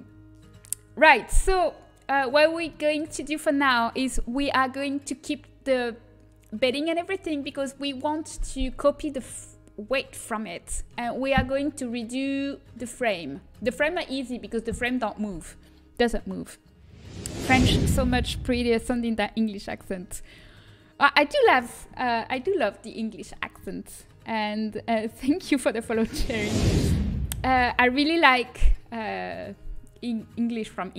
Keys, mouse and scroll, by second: 1.6-5.2 middle drag.